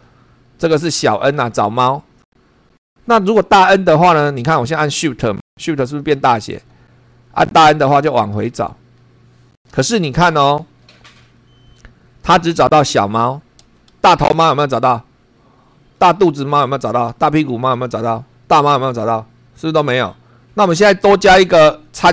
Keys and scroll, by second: 0.6 n, 7.9 shift+n, 13.9 Down, 15.6 Down, 16.5 Right, 17.1 Down, 18.4 Down, 19.9 Up.